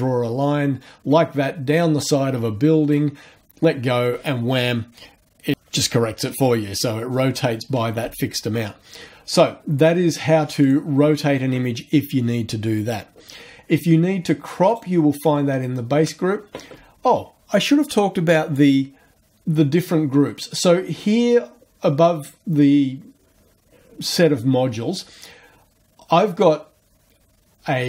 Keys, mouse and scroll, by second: 10.6 click, 14.7 click.